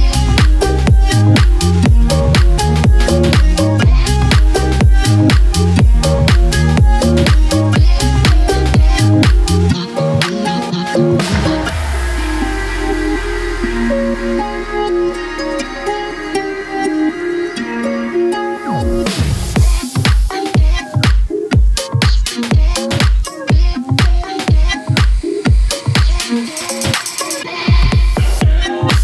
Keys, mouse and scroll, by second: 1.6 click, 11.0-13.5 drag, 13.5 ctrl+z, 14.1-25.4 drag, 25.3 ctrl+Num_Lock, 25.4 ctrl+z.